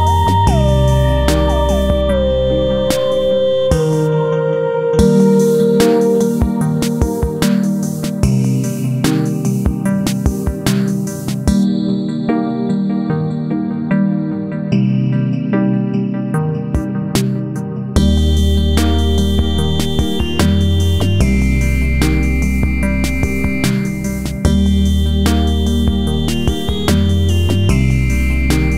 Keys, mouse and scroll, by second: 0.3-2.2 drag, 2.2-5.0 drag, 5.0 F4, 5.8 click, 6.6 click, 8.5-16.3 drag, 16.5 F4, 16.9 click, 18.3 click, 19.9-23.2 drag, 23.2 F4, 23.6-25.0 drag, 25.5 F4, 25.7 click, 27.0 click, 27.9-28.7 drag.